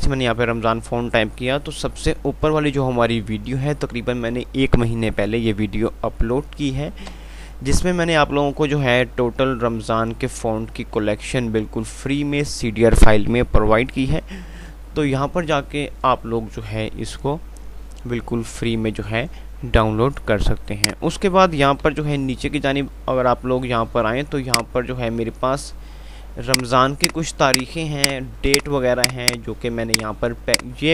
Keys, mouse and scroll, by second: 7.1 F5, 7.1 typing, 14.8 F5, 15.5 typing, 20.7 click, 22.4 F3, 24.7 click, 25.0 F2, 26.7 click, 26.7 typing.